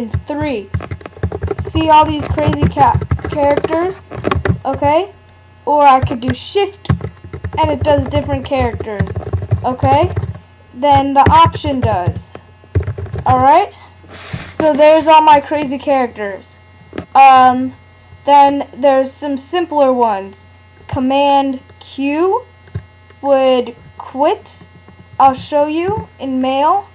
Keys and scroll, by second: 0.1 alt+3, 0.8 alt+4, 1.2 alt+§, 1.4 alt+7, 1.6 alt+8, 1.8 alt+9, 1.9 alt+0, 2.1 alt+0, 2.3 alt+9, 2.5 alt+8, 2.6 alt+6, 2.8 alt+4, 3.0 alt+3, 3.1 alt+2, 3.3 alt+3, 3.3 alt+4, 3.4 alt+5, 3.5 alt+6, 3.6 alt+7, 3.7 alt+8, 3.7 alt+9, 6.9 alt+shift+3, 7.3 alt+shift+4, 7.5 alt+shift+5, 7.6 alt+shift+6, 7.8 alt+shift+7, 8.0 alt+shift+8, 8.6 alt+shift+‡, 8.7 alt+shift+á, 9.0 alt+shift+f, 9.2 alt+shift+g, 9.3 alt+shift+h, 9.5 alt+shift+ó, 9.6 alt+shift+j, 9.8 alt+shift+f, 10.1 alt+shift+o, 11.3 alt+g, 11.5 alt+f, 11.7 alt+g, 11.8 alt+j, 12.1 alt+c, 12.9 alt+shift+o.